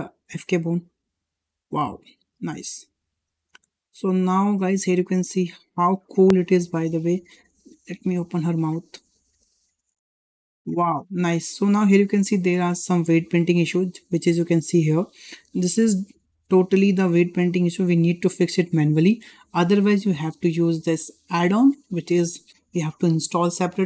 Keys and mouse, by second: 0.4 middle click, 0.8 g, 4.1 shift+middle drag, 4.5 middle drag, 4.9 shift+middle drag, 5.4 middle drag, 5.8 shift+middle drag, 6.8 middle drag, 8.4-8.7 middle drag, 8.8-9.2 shift+middle drag, 9.6 g, 12.4-12.7 middle drag, 13.4-13.8 middle drag, 15.2 g, 20.4-20.9 drag, 21.7-23.8 drag.